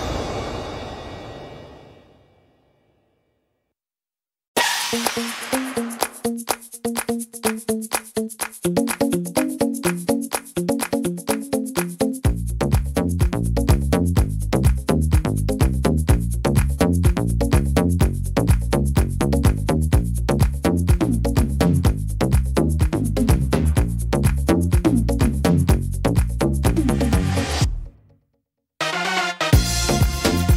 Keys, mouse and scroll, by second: 0.7 s, 6.3 click, 6.3 middle click, 8.3 middle click, 9.2-10.0 scroll down 5, 9.8 middle click, 10.2-11.1 scroll up 7, 10.9 middle click, 11.4 right click, 12.5 l, 13.5 s, 24.3 middle click, 24.5-25.3 scroll down 5, 25.1 middle click, 25.5 scroll up 3, 26.3 scroll up 2, 26.3 shift+middle click.